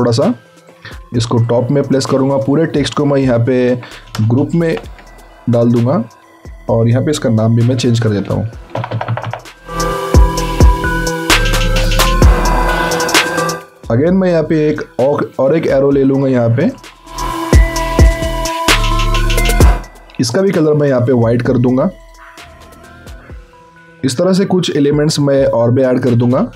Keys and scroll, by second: 4.5 ctrl+shift+g, 7.8-10.2 typing, 11.7 alt+Tab, 12.6 ctrl+c, 12.6 alt+Tab, 12.9 ctrl+v.